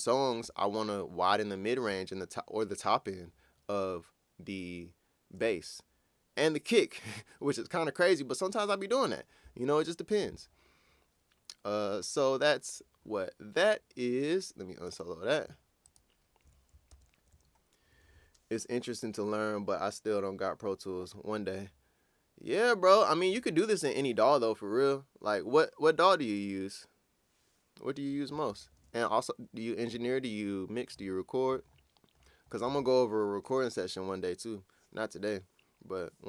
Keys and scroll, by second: 16.9 ctrl+super+w, 28.5 super+s.